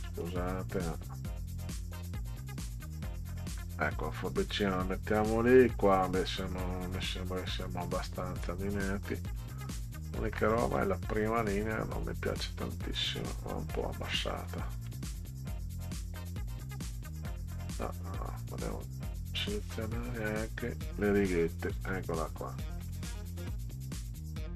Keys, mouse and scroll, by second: 1.0-3.0 drag, 3.2-3.6 scroll down 2, 3.9 click, 8.6 click, 12.0-13.8 drag, 18.1-20.2 drag, 21.7 Down, 22.8 Left, 24.0 Right.